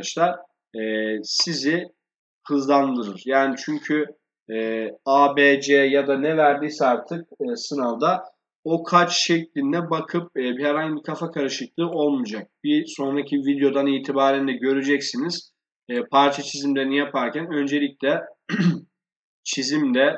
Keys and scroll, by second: 4.3 Escape.